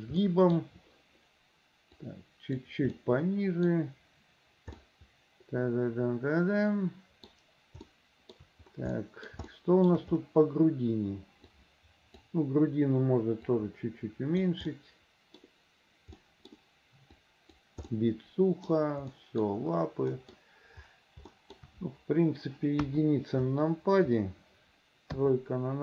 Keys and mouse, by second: 0.4 middle click, 0.4 click, 2.1 click, 3.0 middle click, 4.9-7.4 middle drag, 8.0 shift+middle click, 9.1 middle click, 9.6 shift+middle click, 11.6 click, 13.6 click, 14.8 middle click, 16.3 click, 17.2 right click, 18.0 click, 19.2 click, 20.2 click, 21.4 shift+click, 22.9 KP_1, 25.2 KP_3.